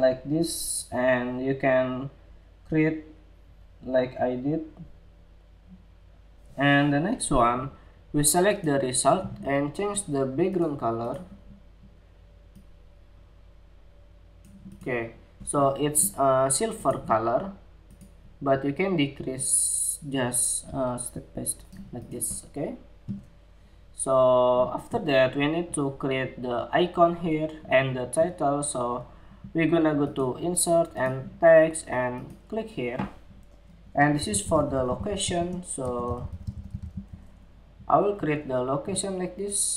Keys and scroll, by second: 37.1 Escape, 37.9 Escape.